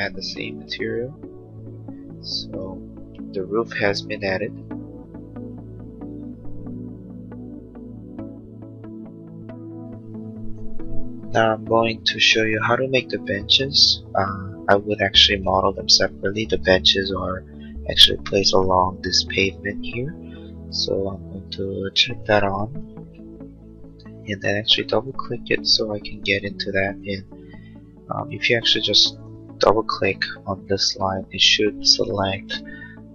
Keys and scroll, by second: 1.9 space, 2.3 Escape.